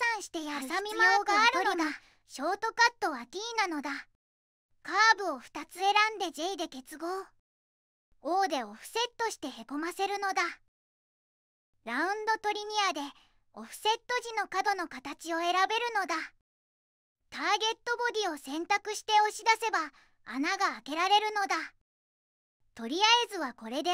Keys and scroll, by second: 4.9 2, 5.9 j, 8.2 o, 16.3 3.